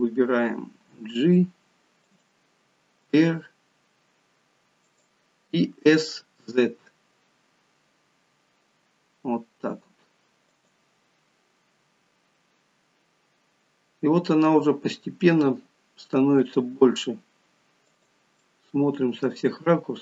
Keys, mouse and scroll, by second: 0.8 g, 11.8-12.2 scroll down 2, 12.7 scroll down 2, 13.6-14.0 scroll up 2, 16.4 s, 18.4 middle click.